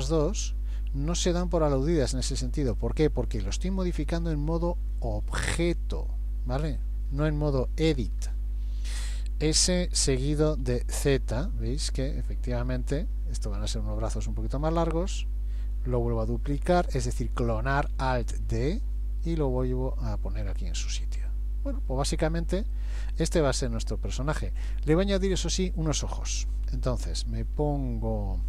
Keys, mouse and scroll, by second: 1.5-2.0 scroll down 1, 2.0-2.5 scroll up 2, 2.5 shift+middle click, 3.9 g, 9.6 s, 12.4 scroll down 1, 13.7 g, 18.4 alt+d, 21.0 middle click, 23.4 middle click, 24.6 click.